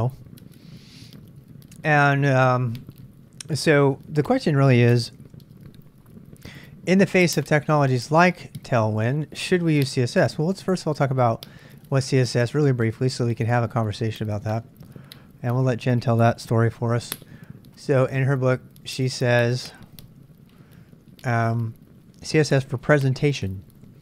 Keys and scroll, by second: 5.3 super+Tab, 8.0 Tab, 10.4 super+Tab, 14.4 super+Tab, 14.6 super+Tab, 23.4 j, 23.8 j.